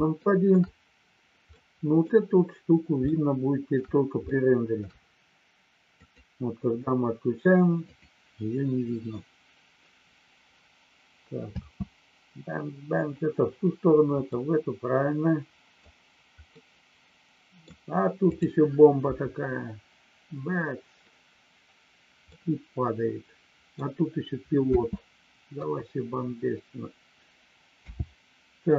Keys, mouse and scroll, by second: 0.1 shift+middle click, 1.5 middle click, 3.0 shift+middle click, 4.2 shift+middle click, 6.0 click, 11.5 space, 14.2-15.9 middle drag, 16.5-17.6 middle drag, 18.2 click, 22.2-23.6 middle drag, 24.6 space, 27.8 n.